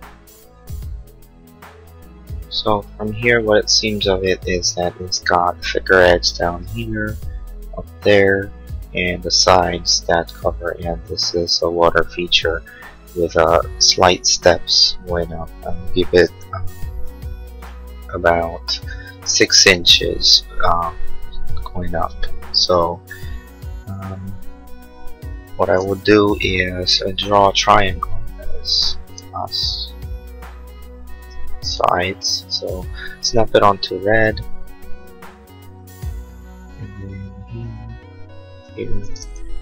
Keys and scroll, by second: 16.9 l, 19.1 Escape, 26.6 l.